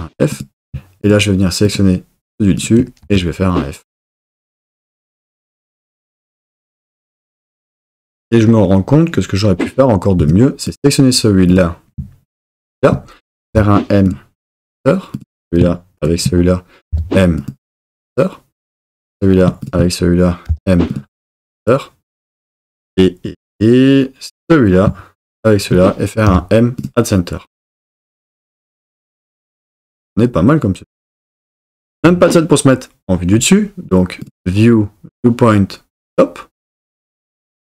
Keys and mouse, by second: 3.0 f, 10.2 1, 12.5 shift+click, 13.5 m, 15.1 click, 16.9 m, 20.5 m, 24.4 click, 25.3 shift+click, 26.3 m, 32.0 KP_7, 34.2-36.7 drag.